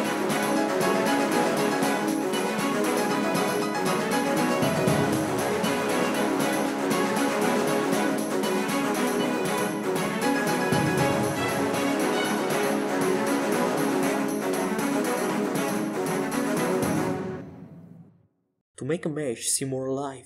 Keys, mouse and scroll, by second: 3.1-7.5 drag, 3.8-6.3 right drag, 11.6-13.9 right drag, 15.8-18.3 right drag, 17.3-19.5 drag.